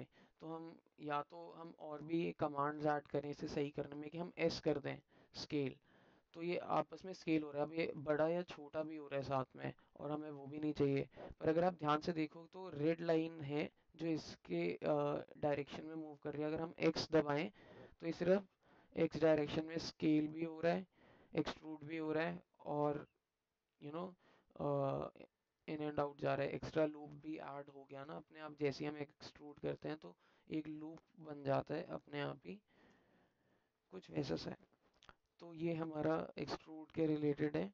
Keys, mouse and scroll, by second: 26.2 alt+click, 27.4 alt+click, 28.5 alt+click, 32.0 alt+click, 32.5 alt+middle click, 33.4-37.6 alt+middle drag.